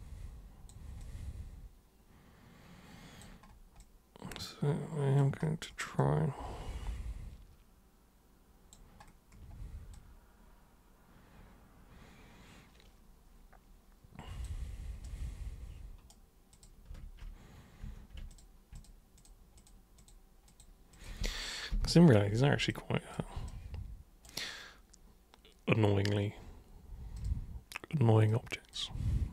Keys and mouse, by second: 1.0-3.2 drag, 3.8-5.2 drag, 6.0-8.7 drag, 9.9-14.4 drag, 15.0-16.1 super+right drag, 16.5 super+click, 17.8 super+q, 18.3 ctrl+shift+super+click, 18.8 ctrl+shift+super+click, 19.2 ctrl+shift+super+click, 19.6 ctrl+shift+super+click, 20.0 ctrl+shift+super+click, 20.4 ctrl+shift+super+click, 20.9 ctrl+shift+super+click, 22.6 alt+super+click, 23.5 super+right click, 27.2 super+click, 28.3 super+click.